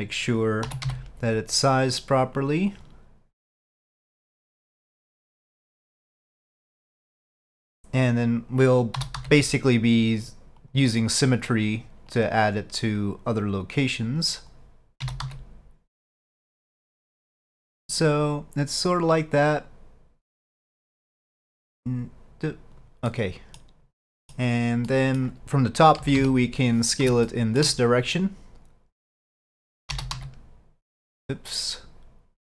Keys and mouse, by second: 3.9-7.4 drag, 12.2-14.6 drag, 18.7-22.8 drag, 23.1-23.7 middle drag, 24.2 middle click, 25.0 middle click, 27.3-27.7 shift+middle drag.